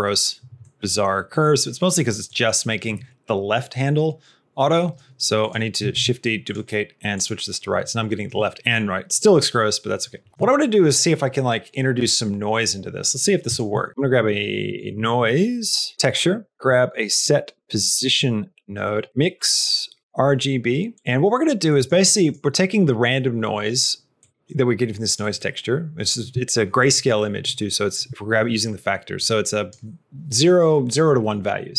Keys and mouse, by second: 0.6 middle click, 2.2 click, 5.3 click, 5.8 shift+d, 7.0 click, 13.3 click, 13.7 middle click, 13.9 shift+a, 14.7 BackSpace, 16.5 shift+a, 19.1 shift+a, 21.1 middle click, 21.7 click, 22.2 click, 24.1 click, 29.0 click.